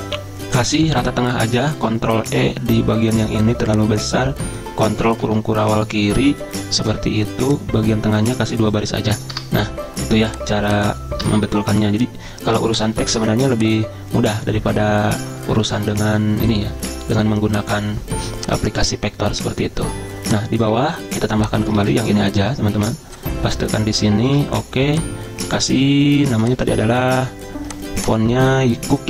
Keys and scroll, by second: 1.8 ctrl+e, 5.0 ctrl+[, 5.2 ctrl+[, 5.6 ctrl+[, 9.3 BackSpace, 11.2 BackSpace, 21.7 ctrl+a, 22.7 ctrl+c, 23.5 Return, 23.6 Return, 24.2 ctrl+v.